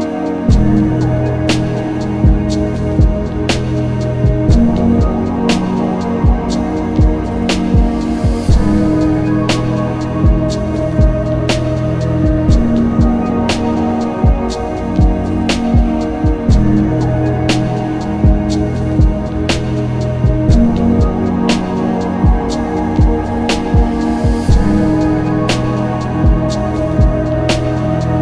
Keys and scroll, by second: 8.2 ctrl+s, 8.7 ctrl+z, 9.1 s, 9.6 ctrl+z, 10.5 z, 14.3 ctrl+z, 15.3 z, 15.8 ctrl+z, 16.7 ctrl+z, 22.1 ctrl+z, 22.7 z, 23.8 z, 26.2 ctrl+alt+z.